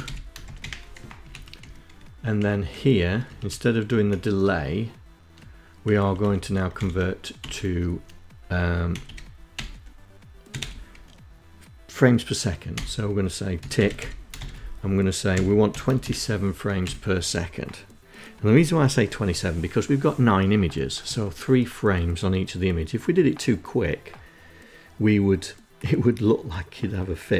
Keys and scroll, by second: 0.1 Down, 0.2 Up, 0.5 Down, 0.8 Page_Down, 1.3 Down, 1.6 Down, 2.2 Up, 2.3 Up, 3.0 Left, 4.8 Right, 5.0 Right, 5.1 Right, 5.7 shift+End, 6.3 Delete, 7.8-10.0 typing, 11.6-15.4 typing, 15.6 Down, 15.7 Up.